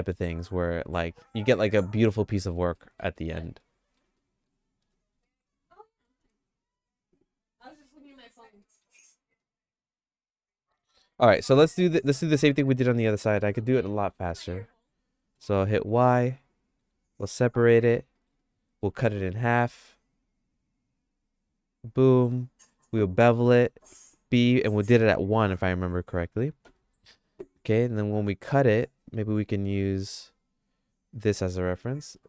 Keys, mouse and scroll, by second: 2.7 middle click, 3.1 middle click, 3.5 shift+middle click, 4.2 middle click, 4.8 Tab, 5.2 middle click, 5.6 shift+middle click, 7.8 3, 8.6 middle click, 9.0-11.2 shift+middle drag, 12.5 middle click, 15.4 y, 16.8 g, 18.2 middle click, 18.4 shift+middle click, 19.5 ctrl+r, 23.5 ctrl+b, 27.7 middle click, 29.1 KP_1, 29.9 KP_3, 32.1 ctrl+r.